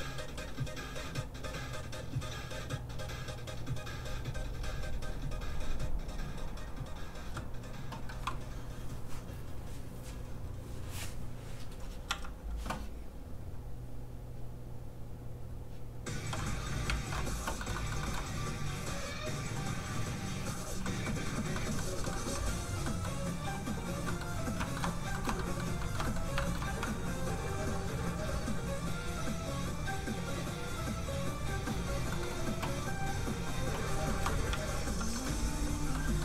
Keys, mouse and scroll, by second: 12.0 z, 13.4 click, 16.8 ctrl+Tab, 17.5 shift+Tab, 17.6 shift+middle click, 17.7 middle click, 18.0 shift+middle click, 18.9 middle click, 19.3 scroll down 1, 19.7 scroll up 1, 20.6 scroll down 1, 20.8 middle click, 21.2 scroll down 1, 21.5 middle click, 22.1 scroll up 1, 22.8 middle click, 24.7 shift+middle click, 25.1 shift+middle click, 25.3 middle click, 25.4 middle click, 25.7 scroll up 1, 25.8 shift+middle click, 26.0 middle click, 26.4 shift+middle click, 27.7 middle click, 27.8 click, 32.1 middle click, 33.2 click, 34.0 shift+middle click, 34.2-34.5 scroll up 1, 34.5 z, 35.1 shift+middle click, 35.9 middle click, 36.0 middle click.